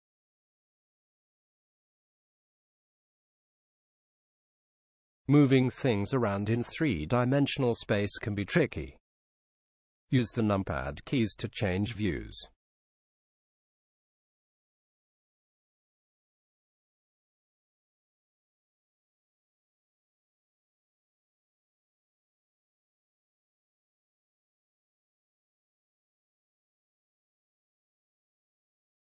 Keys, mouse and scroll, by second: 3.3-5.1 drag, 7.0 KP_7, 11.0 g, 14.9 r, 19.0 KP_1, 21.2 g, 25.5 r.